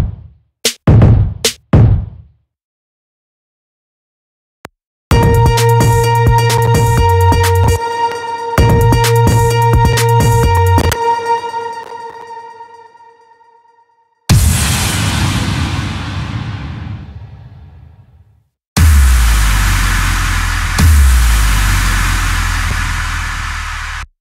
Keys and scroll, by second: 4.1 space, 7.2 space, 10.9 space.